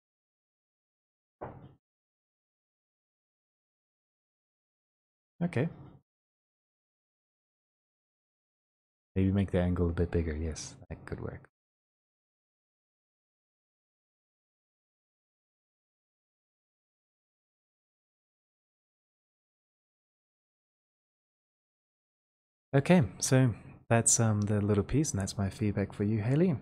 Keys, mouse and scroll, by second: 5.1 Escape, 6.9 click, 11.2 click, 13.0 click, 22.2 click.